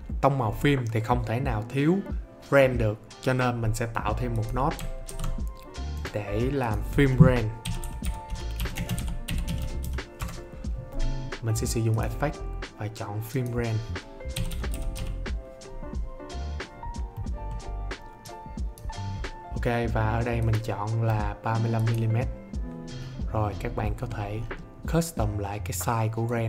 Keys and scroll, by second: 5.0 alt+s, 7.3-10.2 typing, 14.0-15.4 typing.